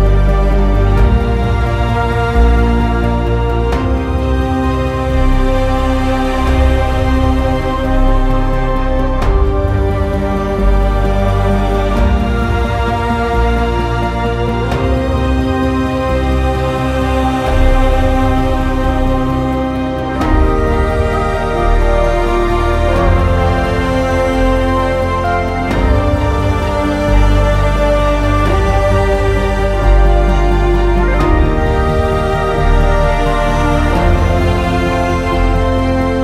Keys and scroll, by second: 18.3-19.0 typing, 34.0-34.8 typing.